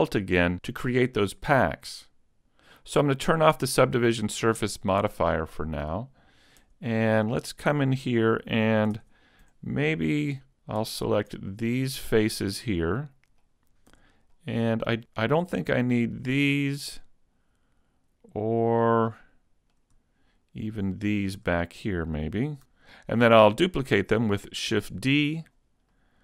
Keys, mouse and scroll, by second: 5.5 click, 6.6 Tab, 7.0 middle click, 9.0 ctrl+Tab, 11.0 alt+right click, 11.6 middle click, 13.9 z, 14.4 middle click, 16.0 shift+right click, 16.5 shift+right click, 17.0 middle click, 20.7 shift+right click, 21.2 shift+right click, 21.6 middle click, 24.8 shift+d, 25.5 click, 26.0 middle click.